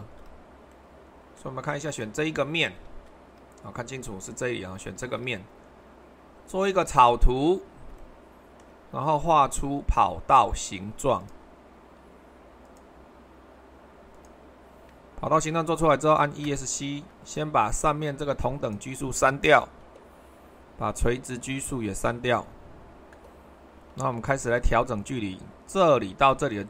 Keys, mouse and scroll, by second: 2.8 super+1, 5.1 super+2, 6.6-7.7 drag, 11.2-12.3 drag, 12.6-13.7 drag, 14.1-15.2 drag, 16.4 Escape, 18.6-19.7 drag, 21.9-23.1 drag, 23.1 Delete.